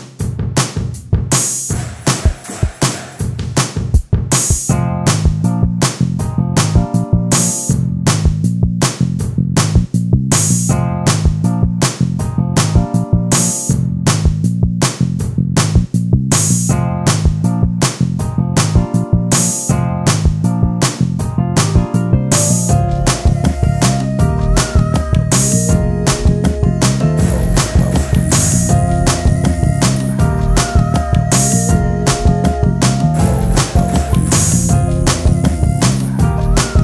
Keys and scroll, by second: 18.3 space, 19.1 d, 21.3 ctrl+f, 28.1 space, 36.7 e.